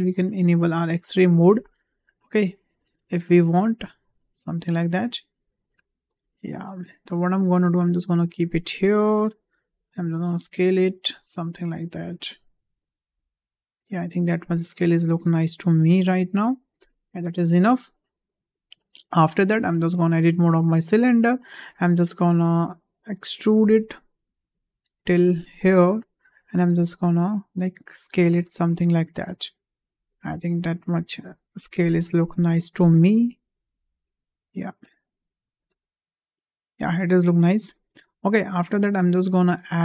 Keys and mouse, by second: 3.0 drag, 3.9 click, 4.7 shift+middle drag, 5.3 click, 5.7 shift+middle drag, 6.9-9.2 drag, 9.5 s, 11.6 click, 13.0 s, 14.8 click, 15.2-16.3 drag, 18.3 shift+middle click, 19.6 Tab, 21.0 click, 22.0 shift+middle click, 23.2 e, 26.7 s, 33.1 click, 33.6 s, 35.7-37.0 middle drag, 39.2 click.